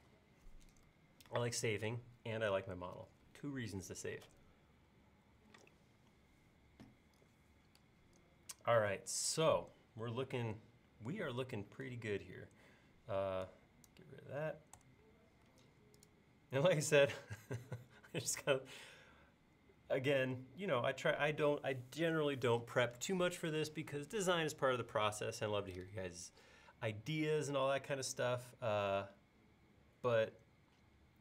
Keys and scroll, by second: 0.0 super+s, 14.9 BackSpace.